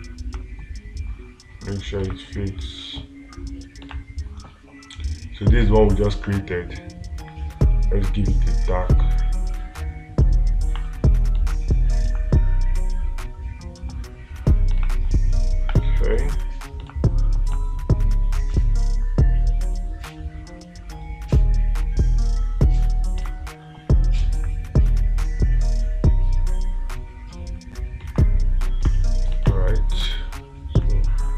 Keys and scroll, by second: 2.5 space, 12.5 space, 15.2 space, 17.3 space, 23.7 space, 28.5 space, 29.9 space.